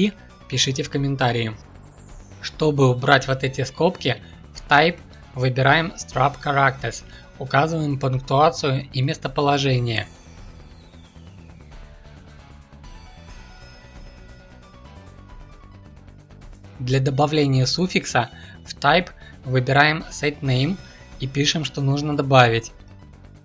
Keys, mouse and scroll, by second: 2.6 shift+click, 6.1 ctrl+F2, 15.5 shift+click, 16.5 ctrl+F2.